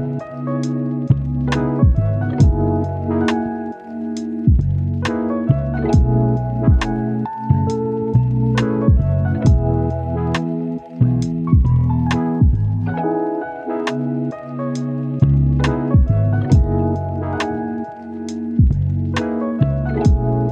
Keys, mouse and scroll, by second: 2.1 right click, 3.1 scroll up 1, 3.3 click, 3.5 scroll down 1, 3.6 scroll up 1, 3.7 right click, 5.4 scroll down 1, 5.5-7.7 scroll up 1, 7.7 click, 8.3 right click, 9.0 click, 11.0-12.8 right drag, 13.0-13.5 scroll up 2, 13.2 click, 13.5-14.8 right drag, 15.1 click, 15.5 right click, 17.7 click, 20.1 right click.